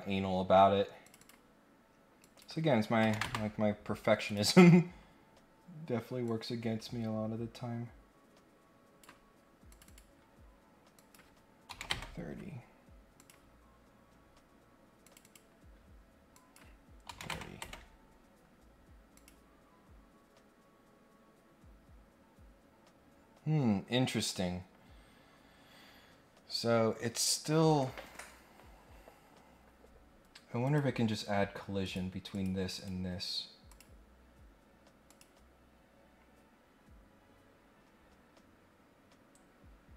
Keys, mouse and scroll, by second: 0.2 scroll up 1, 1.0 click, 2.2 click, 4.2 click, 5.2 scroll up 1, 6.2-9.0 drag, 9.7 click, 9.8 click, 10.9 click, 13.1 click, 14.1 scroll up 1, 15.0 click, 15.2 click, 16.3 click, 19.1 click, 25.3 scroll up 1, 30.6 click, 31.8 click, 32.3 click, 32.7 right click, 33.7 click, 35.0 click.